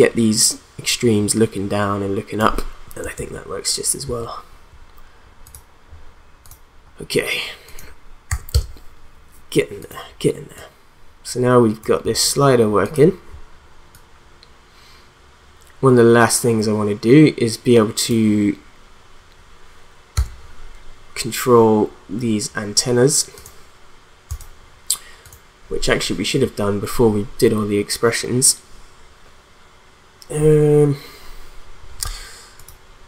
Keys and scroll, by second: 3.1 ctrl+z, 8.3 0, 8.5 Return, 20.2 v.